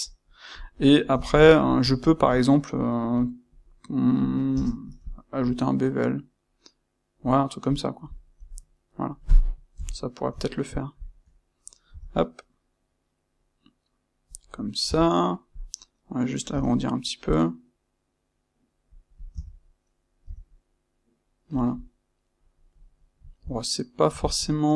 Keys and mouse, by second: 0.8-14.3 middle drag, 8.1 click, 9.7 KP_1, 14.3 click, 14.8 Tab, 15.5 click, 19.0 click, 19.3 Tab, 21.6 click, 22.6-24.7 middle drag.